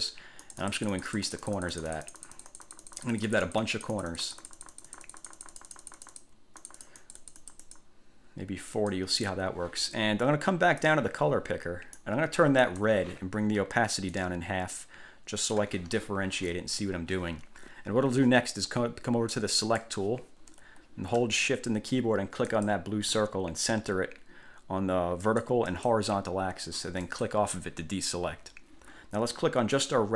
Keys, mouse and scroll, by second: 0.6 click, 6.8 click, 8.9 click, 11.0-12.3 drag, 12.8 click, 14.3-15.9 drag, 19.8 click, 22.6 shift+click, 25.4-26.2 drag, 27.2 click, 30.0 click.